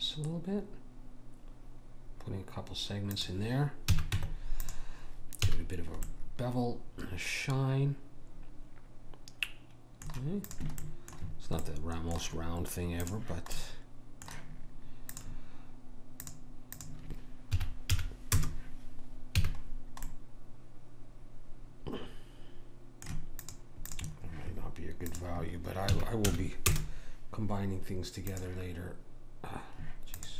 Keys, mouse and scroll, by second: 3.9 a, 4.1 Tab, 5.5 a, 10.5 click, 10.8-13.0 middle drag, 13.0 click, 19.3 a, 19.7 middle click, 20.6-21.8 middle drag, 23.4-26.9 drag, 28.3 click, 30.2-30.3 drag.